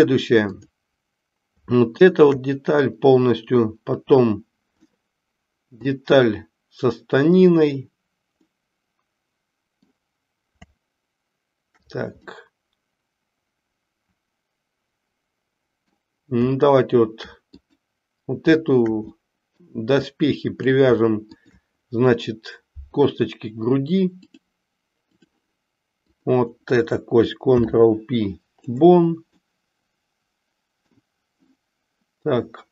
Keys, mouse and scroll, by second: 4.8-5.8 middle drag, 8.5-9.9 middle drag, 12.3-16.1 middle drag, 17.5 click, 19.1 middle click, 20.1 middle click, 21.3 shift+click, 24.2-25.2 drag, 26.1 click, 27.5 ctrl+p, 29.5-30.9 middle drag.